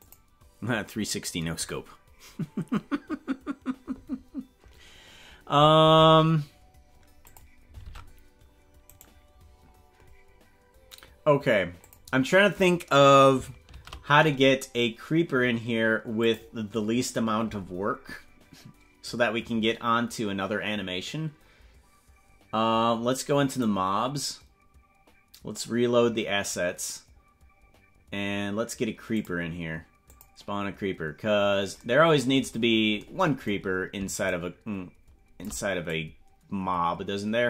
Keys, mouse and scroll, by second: 7.2 click, 7.9 ctrl+Tab, 8.9 right click, 11.8 click, 13.7 shift+a, 16.2 click, 17.1-17.8 scroll down 12, 23.5-27.4 drag, 28.2 scroll down 4, 29.3 click, 30.1 click, 31.4 scroll down 2, 32.5 scroll down 1, 34.2-35.4 shift+drag, 35.9-37.4 drag.